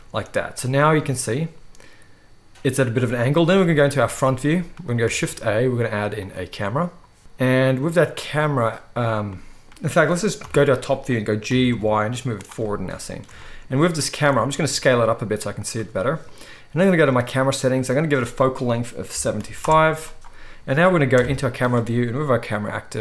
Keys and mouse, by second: 3.4 KP_1, 5.0 shift+a, 10.3 KP_7, 11.4 g, 14.2-14.5 shift+right drag, 14.5-17.6 drag, 14.6 s, 17.6-23.0 right drag, 17.7-23.0 drag, 17.7-23.0 middle drag, 21.1 KP_0.